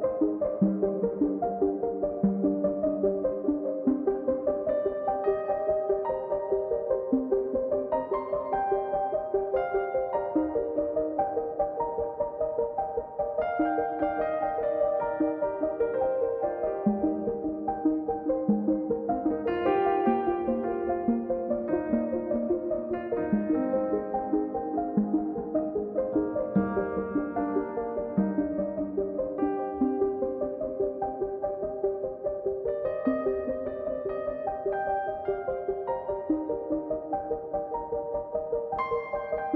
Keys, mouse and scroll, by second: 0.1 scroll, 0.2 middle click, 0.8-2.2 drag, 2.2 scroll down 1, 2.2 scroll, 2.3 middle click, 2.6 scroll up 1, 3.3-4.5 middle drag, 4.5 click, 5.0 middle click, 5.7 click, 6.5 middle click, 6.8 click, 7.4 middle click, 8.8 click, 9.1 middle click, 9.9 scroll down 2, 10.1 scroll up 1, 10.4-12.2 drag, 17.0-18.2 drag, 19.2 KP_1, 19.6-20.4 scroll up 2, 20.4-22.5 drag, 24.2 click, 24.5-24.8 scroll down 5, 24.8-25.2 scroll up 3, 25.2-28.1 drag, 29.4 scroll down 2, 29.5 middle click, 30.1-31.2 drag, 34.1-35.6 drag, 36.3 middle click, 36.6-37.7 drag, 38.6 click, 38.8 middle click, 39.2-39.5 drag.